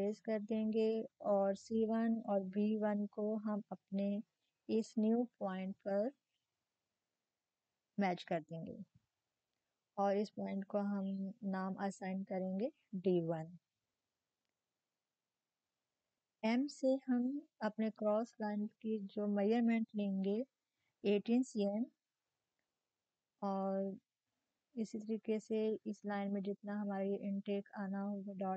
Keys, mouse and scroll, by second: 5.9-9.2 drag, 9.2 d, 11.1 click, 15.1 shift+click, 19.5-20.2 typing, 20.2 click, 22.1-23.2 typing, 23.2 click, 23.2 Up, 24.7 click, 24.7 typing, 24.7-28.5 drag.